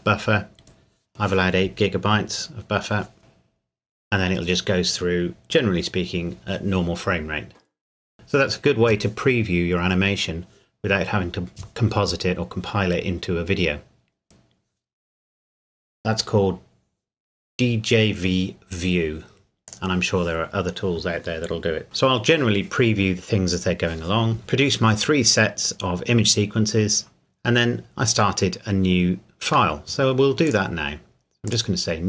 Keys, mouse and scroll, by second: 19.6 click, 24.4 middle click, 30.5 click.